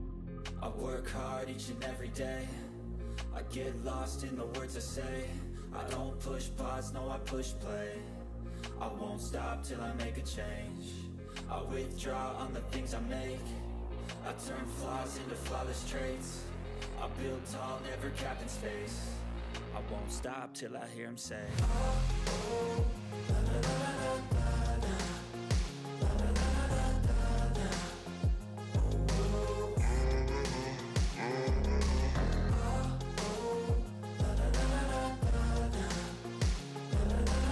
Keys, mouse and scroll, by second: 0.0-3.3 typing, 5.1 click, 8.1 click, 8.1 click, 8.5-9.7 typing, 10.1 click, 10.4 ctrl+s, 11.7 scroll down 1, 12.3 click, 14.0 click, 14.0-16.2 drag, 16.2 shift+,, 16.6 Return, 18.0 click, 18.2-19.5 typing, 19.6 ctrl+s, 20.5 Return, 21.8 click, 22.2 Return, 26.3-30.2 typing, 33.6 Return, 33.6-37.5 typing.